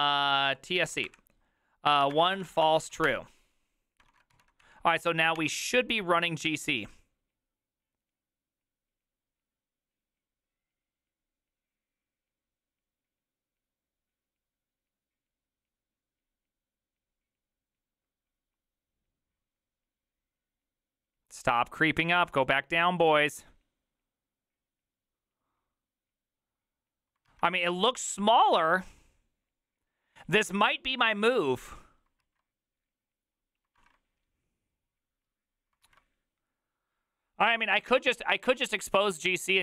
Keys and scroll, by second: 0.2-5.9 typing, 33.8 alt+{, 35.9 alt+{.